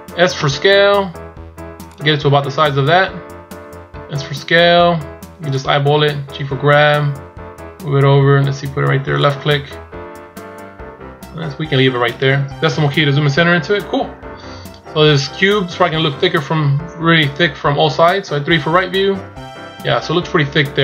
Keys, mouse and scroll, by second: 12.6 KP_Decimal, 13.7-14.2 scroll down 8, 14.9-15.5 scroll down 2, 15.5 scroll down 3, 16.0 scroll up 2, 16.4 scroll down 1, 18.4 KP_3.